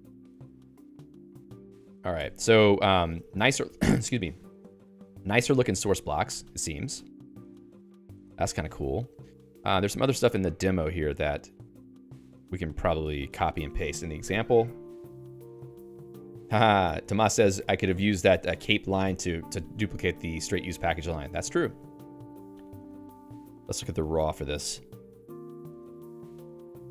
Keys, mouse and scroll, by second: 2.2 Escape, 2.3-4.4 typing, 5.5 Escape, 5.7-9.3 typing, 6.3 Tab, 7.6 Tab.